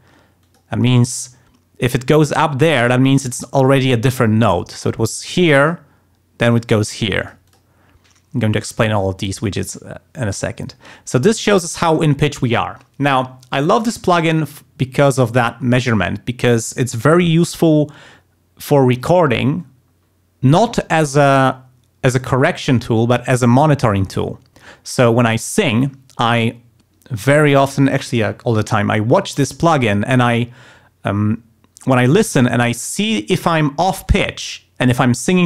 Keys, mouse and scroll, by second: 0.4 click, 3.5 click, 4.0 click, 5.2 click, 5.6 click, 6.5 click, 6.8 click, 7.2 click.